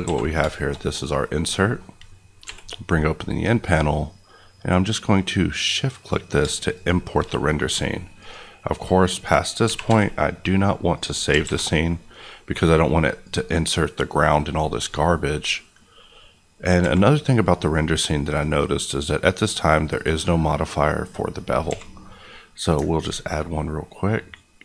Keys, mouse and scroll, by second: 0.0 alt+a, 0.3 scroll down 2, 0.5 shift+middle click, 2.4 n, 3.6 click, 8.1 click, 9.6 g, 9.8 y, 10.9 click, 11.4 alt+a, 13.2 click, 17.1 q, 19.9 click, 21.6 q, 22.7 ctrl+q, 22.9 ctrl+click, 24.3-24.6 scroll up 1.